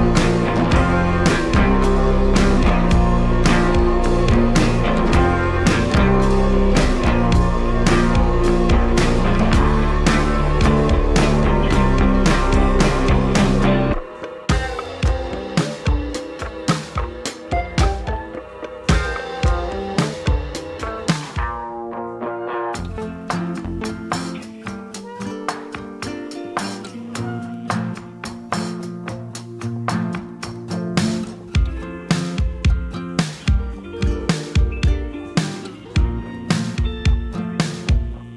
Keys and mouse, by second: 0.0 ctrl+z, 0.4 s, 1.1 s, 2.0 Tab, 2.2 Tab, 2.6 ctrl+r, 4.4 ctrl+r, 5.9 shift+r, 6.3 shift+r, 6.8 click, 7.1 shift+click, 7.4 shift+r, 7.8 alt+Tab, 8.1 s, 9.6-10.8 shift+drag, 10.8 x, 11.7 shift+click, 12.1 s, 14.2 ctrl+z, 14.6 ctrl+z, 15.8 ctrl+middle click, 16.2 w, 16.7 shift+click, 17.5 ctrl+z, 18.5 shift+click, 20.7-21.7 shift+drag, 22.3 shift+d, 22.7 g, 23.9 alt+shift+g, 24.2 alt+shift+click, 24.6 click, 24.6 right click, 25.2 click, 26.5-30.1 drag, 30.5 click, 30.5 right click, 32.8 click, 32.8 right click, 34.1 l, 34.7 x, 35.5 click, 36.1 click, 37.7 click, 38.0 Delete.